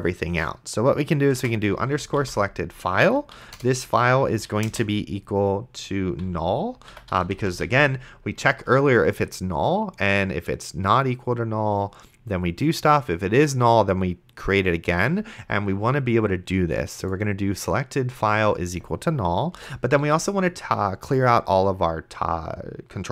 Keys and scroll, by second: 1.3-2.7 typing, 3.4 Down, 3.6 Return, 4.3 space, 4.5 =, 4.7 space, 6.7-8.2 typing, 19.8 Return, 20.0 t.